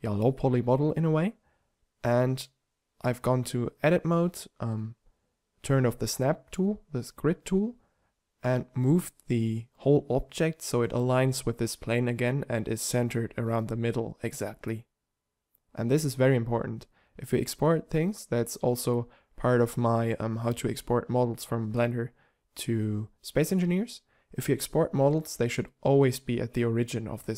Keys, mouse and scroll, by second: 0.7 middle click, 3.3 g, 6.9 Tab, 8.9 g, 10.3 Tab, 11.3 u, 13.5 Tab.